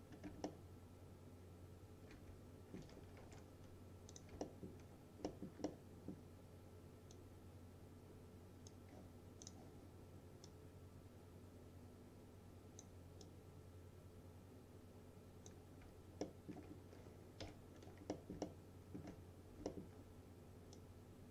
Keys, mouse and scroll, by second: 0.2 scroll down 1, 0.5-3.0 alt+middle drag, 3.3 ctrl+z, 4.2 click, 4.5 alt+middle click, 6.0-6.3 middle click, 7.5-9.0 drag, 13.6-15.8 drag, 16.3 alt+middle click, 16.9-17.5 scroll down 2, 17.5 p, 17.8-18.2 scroll down 1, 18.2 middle click, 18.5-19.1 alt+middle click, 19.3-19.7 scroll up 1, 19.7 alt+middle click, 20.8-21.3 drag.